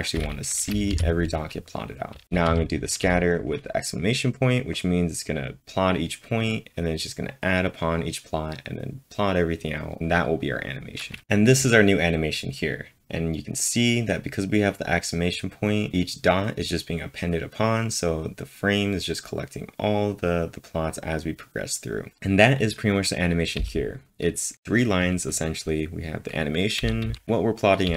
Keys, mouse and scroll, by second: 0.6 shift+1, 2.2-3.0 typing, 23.6 typing, 26.8-27.9 typing.